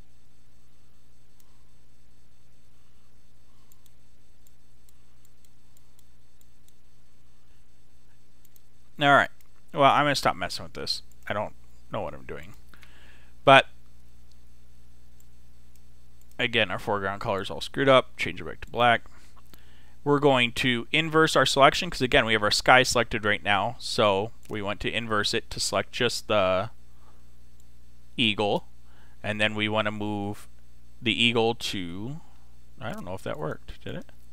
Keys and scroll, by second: 2.9 super+z.